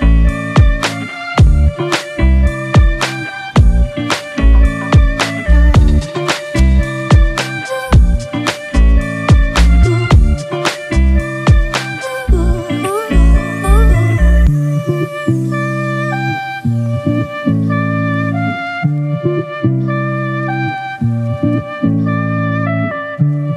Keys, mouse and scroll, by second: 6.7-7.0 scroll up 1, 15.1 alt+right click, 16.2 ctrl+t.